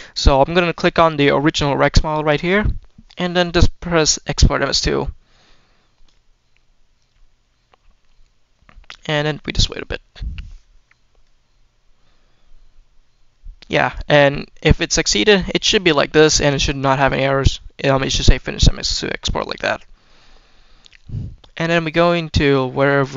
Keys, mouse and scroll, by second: 14.4-15.0 middle drag, 15.2 middle drag, 15.4-15.9 scroll up 1, 16.0 click, 19.2 middle click, 19.9 middle click.